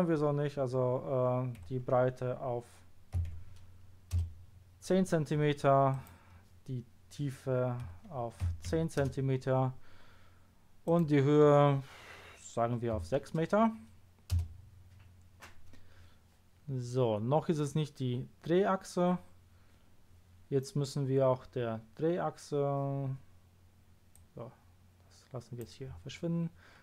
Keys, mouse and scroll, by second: 1.6 0, 3.3 1, 5.9 click, 7.8 0, 8.7 1, 9.0 Return, 10.8 click, 16.6 middle click, 24.1 click.